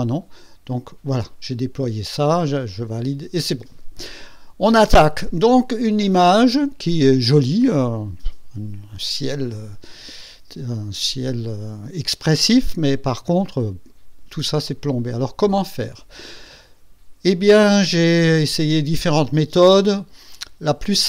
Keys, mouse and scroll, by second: 0.0 click, 2.6 click.